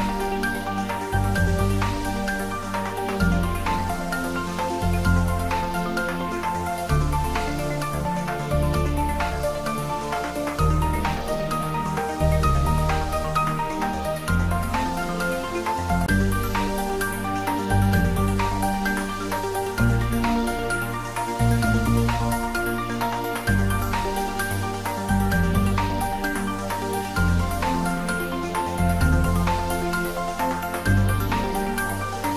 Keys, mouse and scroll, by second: 2.6 Tab, 3.5 click, 4.1 Tab, 4.4 click, 5.1 middle click, 6.1 3, 6.4 click, 10.0 middle click, 11.4 ctrl+z, 13.7-14.0 scroll down 1, 14.4 middle click, 15.2 scroll up 1, 20.2-22.8 drag, 22.8-23.4 scroll down 1, 23.4-26.2 middle drag, 26.2 click, 27.6-29.2 middle drag, 29.2 ctrl+r, 30.5 click, 31.4 ctrl+z.